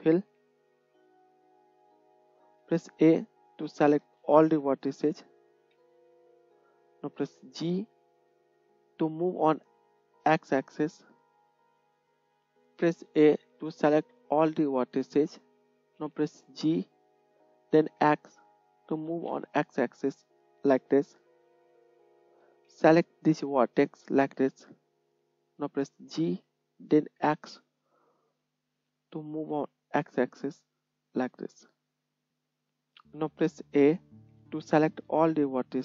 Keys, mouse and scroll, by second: 4.4-8.9 middle drag, 5.7 a, 7.3 g, 13.4 a, 16.7 g, 18.5-22.2 middle drag, 22.2-32.8 ctrl+drag, 22.6 ctrl+z, 26.2 g, 32.3 g, 34.2 a.